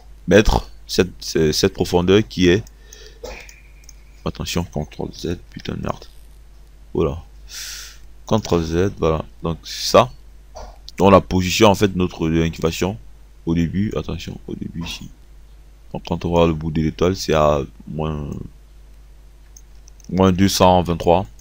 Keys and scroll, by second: 6.0 ctrl+z, 21.0 ctrl+c.